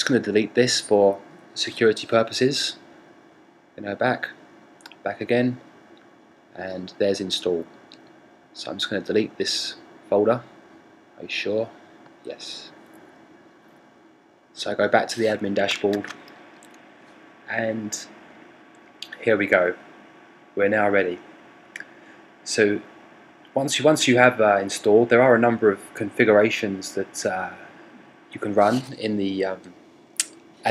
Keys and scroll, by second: 15.3 super+r.